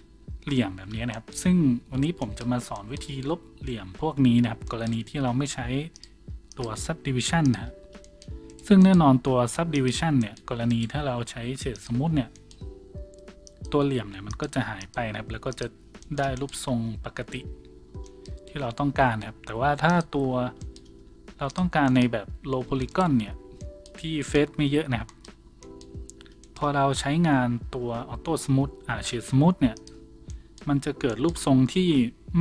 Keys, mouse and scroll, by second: 7.9-32.4 shift+drag, 8.3-16.5 middle drag, 10.7 right click, 11.0 w, 16.7 Tab, 16.7-26.3 middle drag, 17.9 Tab, 17.9 a, 21.0 w, 22.2 a, 22.9 right click, 23.1 Tab, 24.7 Tab.